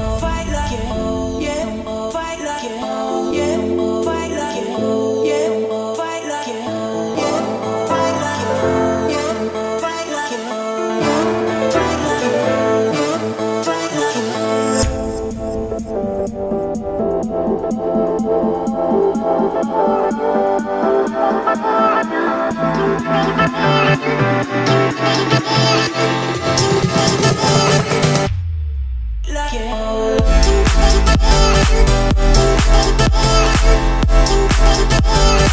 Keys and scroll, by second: 3.5 Return, 8.9 Return, 11.8 Return, 14.8 o, 21.0 Escape.